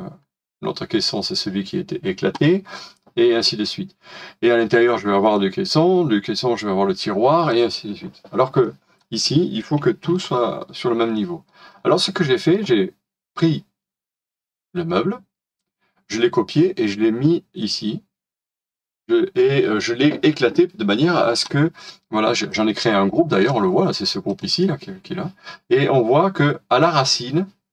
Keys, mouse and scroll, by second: 7.9-8.6 scroll down 1, 8.6 middle click, 9.8 middle click, 11.7-12.1 scroll down 1, 12.2 shift+middle click.